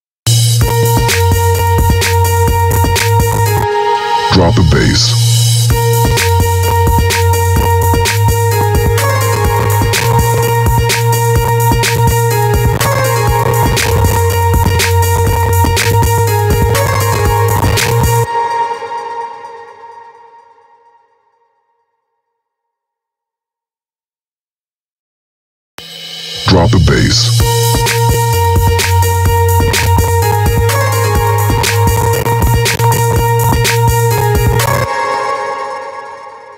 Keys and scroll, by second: 17.7 space, 25.2 space, 34.3 space.